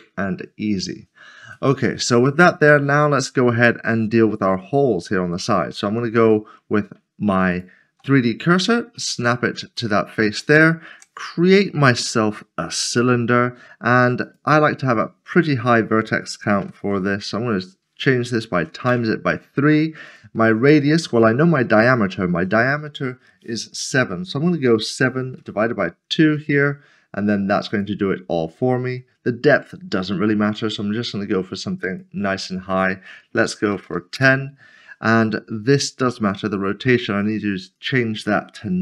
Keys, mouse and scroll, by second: 1.7 middle click, 7.5 shift+right click, 8.6 scroll up 1, 9.2 middle click, 10.0 shift+middle click, 10.9 a, 12.9 click, 16.6 typing, 18.6 typing, 18.9 Return, 20.0 Return, 21.2 click, 25.4-26.2 typing, 27.7 click, 31.9 click, 33.8 typing, 34.2 Return, 36.3 click.